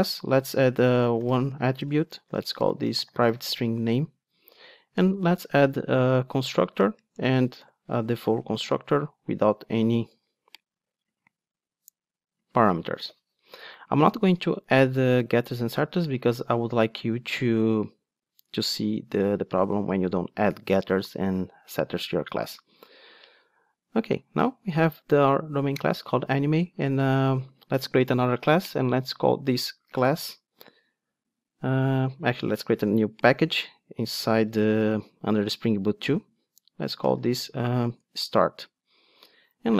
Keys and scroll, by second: 5.1 super+n, 30.1 super+n, 34.4 alt+BackSpace.